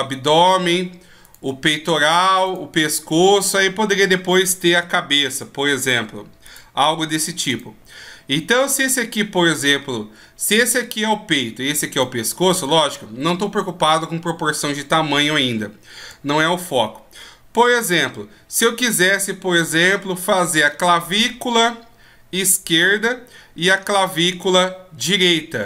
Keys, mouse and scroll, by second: 1.3 right click, 2.4 right click, 4.0 right click, 4.7 e, 7.5 right click, 10.4 right click, 11.9 right click, 12.6 right click, 15.5 shift+scroll up 1, 16.3 scroll up 1, 17.8 right click.